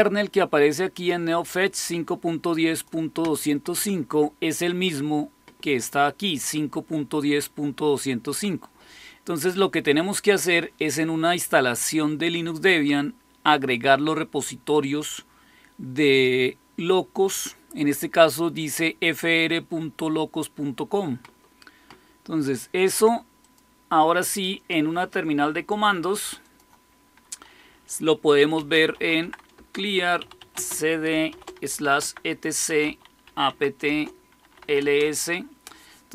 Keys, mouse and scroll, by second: 0.9-2.8 drag, 4.6 click, 23.3 click, 26.3 click, 28.2-35.0 typing.